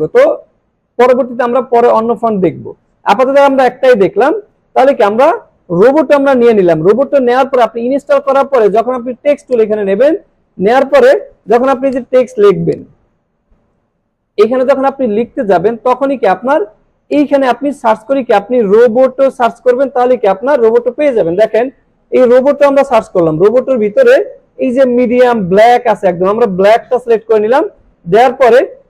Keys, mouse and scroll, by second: 4.6 scroll down 1, 9.5 click, 11.1 click, 11.9-13.3 drag, 14.2 ctrl+a, 17.1 click, 24.1 click, 26.7 click.